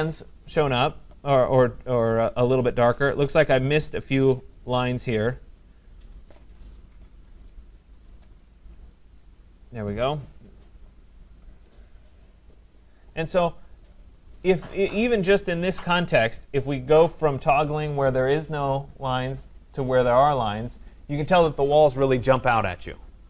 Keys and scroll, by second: 10.9 Escape.